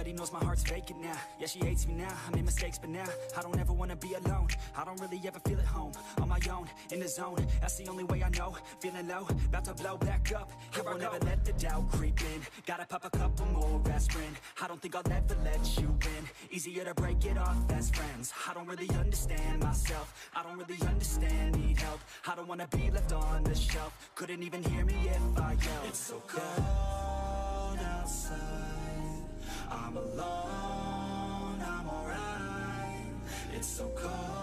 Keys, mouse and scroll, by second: 1.4 drag, 1.9 ctrl+r, 2.5 scroll down 1, 2.6 click, 2.8 Tab, 2.9 click, 3.3 click, 3.5 scroll down 1, 4.0 drag, 4.1 scroll up 1, 4.3 Tab, 4.6 l, 4.7 scroll up 4, 5.0 s, 6.9 scroll down 1, 7.1 Tab, 7.2 drag, 7.4-8.2 middle drag, 8.2 scroll up 3, 8.4 click, 8.8 Tab, 9.0 drag, 9.4 l, 9.7 x, 10.1 KP_3, 10.7 click, 10.9 scroll up 7, 11.6 middle click, 11.8-12.1 scroll down 3, 12.1 middle click, 12.7 3, 12.8 click, 12.9 shift+drag, 13.1 shift+drag, 13.2 shift+click, 13.5 KP_3, 13.8-14.4 scroll up 2, 13.9 shift+middle click, 14.4 e, 16.0 e, 17.9 s, 19.7 middle drag, 19.9-20.2 scroll down 7, 20.4 Tab, 20.5 click, 20.6-21.3 middle drag, 21.3 scroll down 3, 21.4-22.0 shift+middle drag, 22.0 KP_3, 22.5-23.5 shift+middle drag, 23.6 click, 23.9-24.5 scroll up 3, 24.5 click, 24.8 click, 25.3 Tab, 25.8 click, 26.1 shift+a, 26.9 g, 28.2 scroll up 4, 28.4 shift+middle click, 28.7 s, 29.1 scroll up 1, 31.0 scroll up 2, 31.4-34.2 typing, 33.4 click.